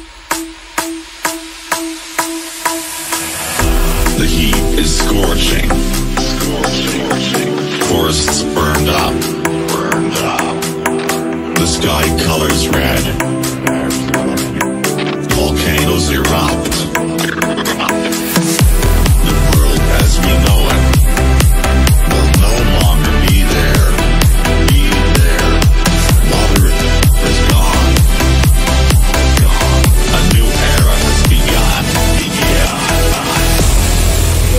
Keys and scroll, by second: 1.3 shift+F2, 1.4 F3, 1.7 Escape, 6.1 F3, 11.0 F3, 11.2 Escape, 11.8 shift+F2, 12.1 Escape.